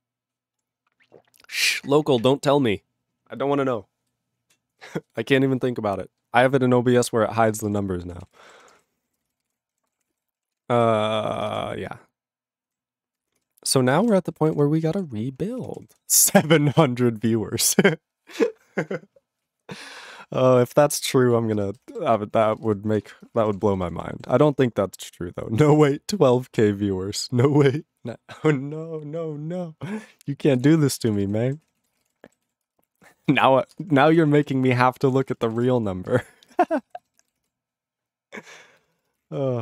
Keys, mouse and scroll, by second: 7.4 ctrl+a, 7.6 ctrl+space, 7.6 ctrl+e, 7.7 ctrl+g, 8.2 ctrl+s, 8.4 ctrl+space, 8.4 ctrl+a, 8.5 ctrl+p, 8.7 ctrl+p, 8.7 ctrl+g, 8.8 ctrl+e, 8.9 ctrl+n, 9.0 ctrl+a, 9.1 ctrl+n, 9.2 ctrl+space, 9.2 ctrl+n, 9.4 ctrl+g, 9.5 ctrl+e, 9.9 ctrl+s, 10.0 ctrl+p, 10.1 ctrl+space, 10.1 ctrl+e, 10.2 ctrl+g, 10.6 ctrl+s, 13.5 ctrl+s, 13.9 ctrl+a, 14.0 ctrl+space, 14.0 ctrl+e, 14.1 ctrl+g, 14.5 ctrl+s, 22.1 ctrl+s, 22.4 ctrl+a, 22.5 ctrl+space, 22.6 ctrl+e, 22.7 ctrl+g, 23.1 ctrl+s, 23.3 ctrl+space, 23.3 ctrl+a, 23.4 ctrl+p, 23.5 ctrl+p, 23.6 ctrl+g, 23.6 ctrl+e, 23.7 ctrl+n, 23.9 ctrl+n, 24.0 ctrl+e, 24.4 ctrl+s, 30.2 ctrl+s, 30.5 ctrl+a, 30.6 ctrl+space, 31.1 ctrl+s, 31.2 ctrl+g, 31.6 ctrl+s, 31.8 ctrl+a, 31.9 ctrl+space, 32.0 ctrl+e, 32.0 ctrl+g, 32.5 ctrl+s, 32.7 ctrl+space, 32.8 ctrl+p, 33.0 ctrl+p, 33.1 ctrl+g, 33.1 ctrl+e, 33.3 ctrl+n, 33.4 ctrl+n, 33.5 ctrl+e, 33.8 ctrl+space, 33.9 ctrl+p, 34.0 ctrl+p, 34.1 ctrl+g, 34.1 ctrl+e, 34.3 ctrl+n, 34.5 ctrl+n, 34.8 ctrl+space, 34.9 ctrl+p, 35.1 ctrl+p, 35.2 ctrl+g, 35.3 ctrl+e, 35.4 ctrl+n, 35.7 ctrl+space, 35.8 ctrl+p, 36.1 ctrl+g, 36.1 ctrl+e, 36.5 ctrl+space, 36.5 ctrl+n, 36.6 ctrl+n, 36.9 ctrl+g, 37.2 ctrl+s.